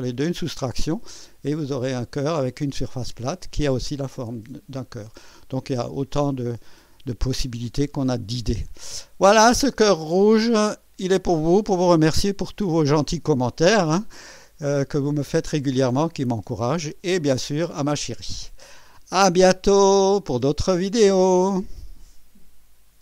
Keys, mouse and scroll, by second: 0.8-3.3 drag, 4.1-6.2 drag, 8.7 click, 10.5-11.5 right drag, 11.4 click, 15.1 scroll up 2, 15.7 scroll down 2, 16.3-17.7 drag, 21.2 right click, 22.9 click.